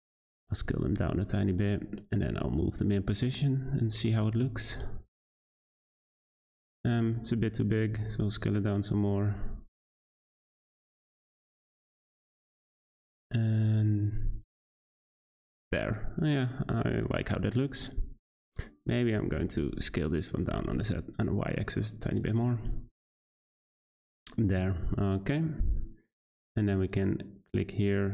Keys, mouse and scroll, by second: 0.6 Tab, 1.1 g, 2.2 r, 4.1-4.5 shift+middle drag, 4.5 g, 6.1-7.4 middle drag, 7.4 Tab, 7.8 a, 7.9 s, 9.1 Tab, 10.3-10.9 scroll up 5, 10.9 g, 13.8-14.5 scroll down 8, 14.5-16.9 middle drag, 16.9 click, 17.2-18.6 middle drag, 18.6 click, 18.9 Tab, 19.1 a, 19.3 s, 22.1 click, 22.2 Tab, 22.6-23.9 middle drag, 23.9-24.2 scroll up 3, 24.2-24.5 shift+middle drag, 24.5 `, 26.9 click.